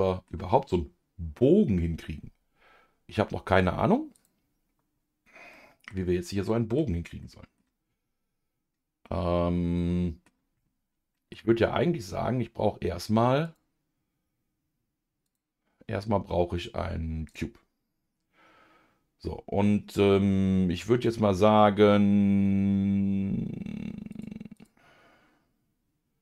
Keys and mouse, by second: 4.1-5.3 drag, 5.5 middle click, 7.2 middle click, 9.6 middle click, 13.5-17.9 drag, 24.1 click.